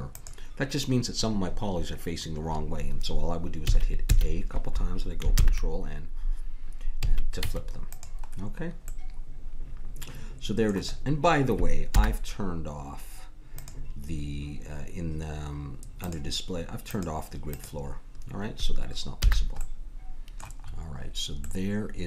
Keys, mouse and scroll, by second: 3.6 a, 4.1 a, 5.3 ctrl+n, 7.0 a, 7.4 Tab, 11.9 n, 13.5-15.5 drag, 16.0-19.4 drag, 19.1 n, 19.6-21.7 middle drag.